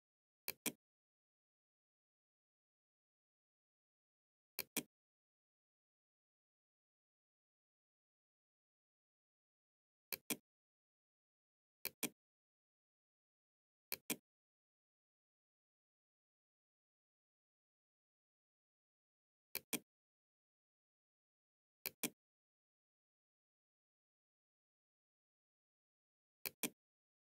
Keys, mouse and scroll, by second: 3.6 click, 9.0 click, 10.7 click, 13.0 click, 18.6 click, 20.9 click, 25.5 click.